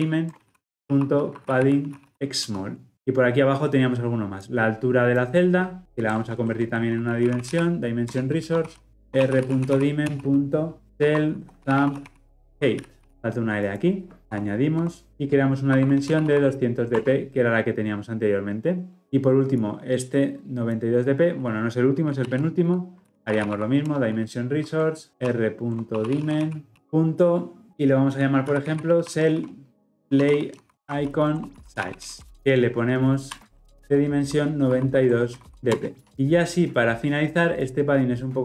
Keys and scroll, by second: 2.3 Return, 8.1 Return, 14.7 Escape, 15.1 alt+Return, 22.2 ctrl+x, 23.9 Return, 32.3 alt+Return.